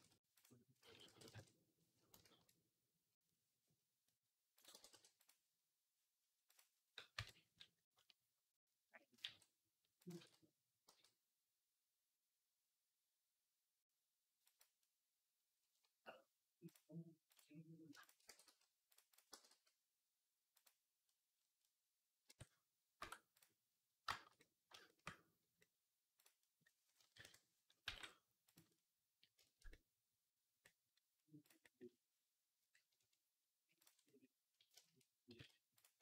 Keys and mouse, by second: 0.7 s, 4.4 click, 4.4 middle click, 4.4-7.0 right drag, 4.6 g, 7.0 KP_3, 9.1 g, 10.0 ctrl+z, 10.7 g, 18.1 g, 19.1 g, 20.9-22.3 right drag, 22.1 Tab, 22.8 Tab, 27.0 KP_3, 27.7 g, 28.7 right click, 28.9 shift+right click, 29.7-32.8 right drag, 32.8-36.0 ctrl+drag, 35.2 z, 35.8 b.